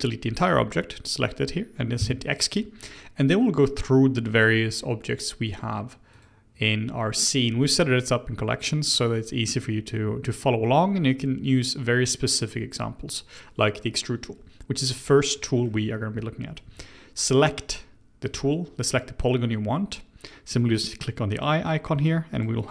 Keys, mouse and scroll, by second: 0.1-1.9 scroll down 1, 1.9 x, 6.1 click, 8.8 click, 15.3-16.6 middle drag, 16.6 Tab, 18.2 click, 21.3 click, 21.9 click, 22.3 click, 22.6 click.